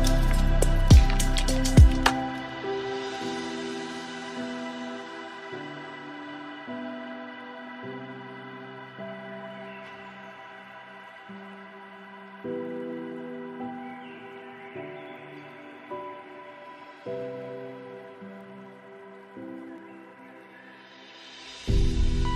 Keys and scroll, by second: 18.8 ctrl+shift+].